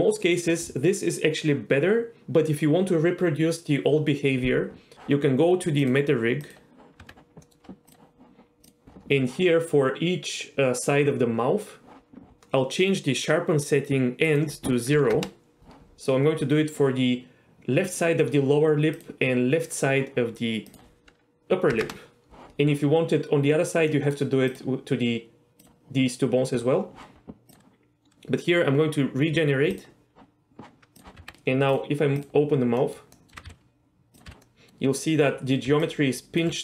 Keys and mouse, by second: 4.9 Tab, 5.8 click, 7.0 Tab, 7.4 middle click, 7.9 click, 8.6 click, 14.4-15.6 drag, 18.9 click, 20.7-22.3 drag, 23.9 middle click, 24.5 drag, 25.6 click, 30.9 click, 31.2 Tab, 32.8 middle click, 33.1 middle click, 33.3 r, 33.4 x, 34.1 click, 34.2 z, 34.4 middle click, 35.6 d, 35.8-36.4 drag, 36.4 d.